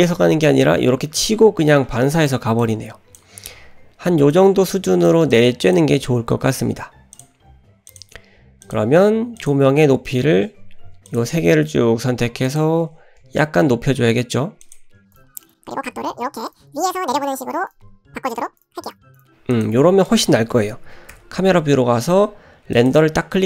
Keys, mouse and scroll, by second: 0.6-2.3 drag, 2.6 click, 4.3 click, 5.3 click, 7.1-8.1 drag, 8.6 click, 9.4 click, 9.7-10.2 scroll down 2, 10.1 shift+middle click, 11.1 shift+click, 12.5 shift+click, 13.2 g, 15.1 click, 15.4 click, 15.7-19.8 typing, 16.5 click, 17.2 click, 18.3 click, 18.8 click, 19.5 click, 21.1 KP_0, 23.0 click.